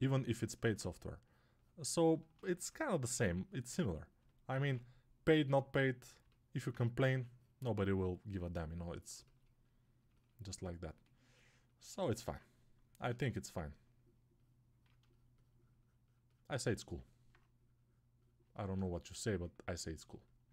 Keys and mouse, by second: 4.4 ctrl+z, 6.9 1, 10.3-20.5 drag.